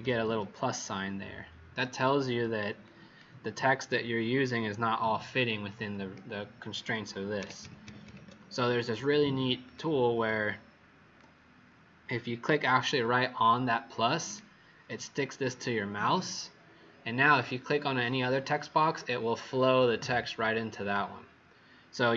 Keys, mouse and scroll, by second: 0.1 ctrl+z, 2.4 z, 2.7 click, 7.3 ctrl+-, 7.6 ctrl+-, 7.8 ctrl+-, 8.0 ctrl+-, 9.6 click, 10.2 click, 10.4 click.